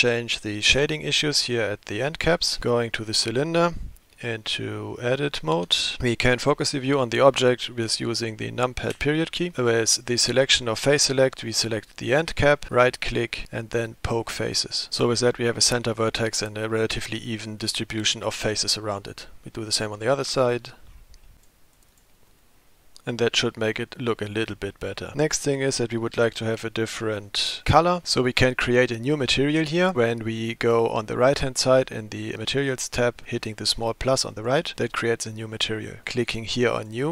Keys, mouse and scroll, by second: 2.6 click, 5.6 Tab, 8.9 KP_Decimal, 11.1 middle click, 12.1 click, 12.7-14.8 drag, 12.7 right click, 20.3 middle click, 20.9-21.3 scroll down 4, 21.3 middle click, 21.4 click, 21.8 click, 21.8 right click, 22.3-23.7 middle drag, 25.1 Tab, 26.7 ctrl+s, 34.3 click, 36.6 click.